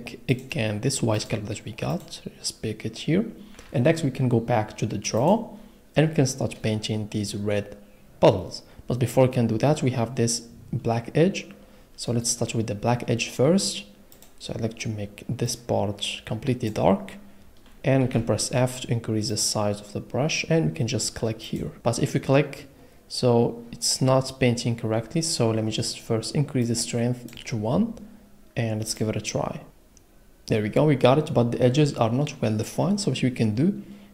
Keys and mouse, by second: 1.1 click, 1.9 click, 5.2 click, 14.1 click, 18.0 f, 19.3 click, 23.1 click, 26.7 middle click.